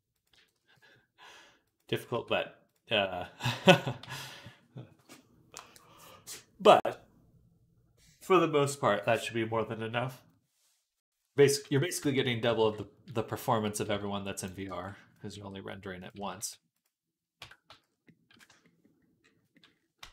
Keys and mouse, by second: 0.2 g, 1.9 Tab, 3.9 ctrl+s, 3.9-12.5 ctrl+drag, 11.7 KP_3, 12.0 Tab, 12.5-20.1 middle drag, 13.7 z, 14.5 b, 15.3 r, 16.0 s, 17.2 Tab, 17.5 z, 19.8 Tab.